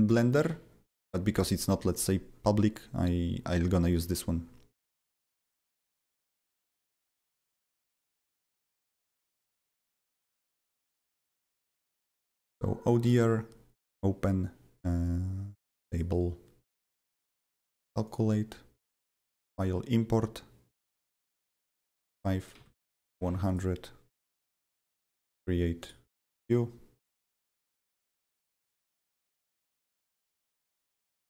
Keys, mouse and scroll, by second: 0.0 BackSpace, 0.4 ctrl+v, 7.7 click, 8.1 click, 9.1 click, 10.6 click, 11.0 click, 11.9 click, 13.0 click, 15.7 click, 15.9 double click, 16.8 click, 17.6 click, 18.0 click, 19.5 click, 21.4 click, 21.7-23.2 typing, 21.9 click, 22.3 click, 23.4 click, 25.0 click, 25.8 click, 26.2 click, 27.2-29.1 drag, 28.1 ctrl+c, 29.1 click, 29.9 Return, 30.2 BackSpace, 30.5 BackSpace.